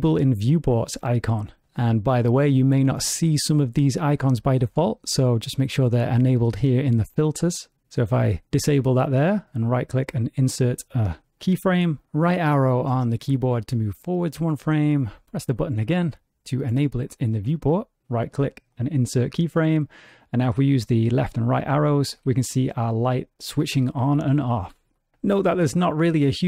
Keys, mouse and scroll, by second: 1.2 click, 4.7 click, 9.1 right click, 13.1 Right, 15.6 click, 17.0 right click, 20.6 Left, 21.2 Right, 21.6 Left, 22.1 Right, 22.6 Left, 23.0 Right, 23.6 Left, 24.1 Right, 24.9 Left.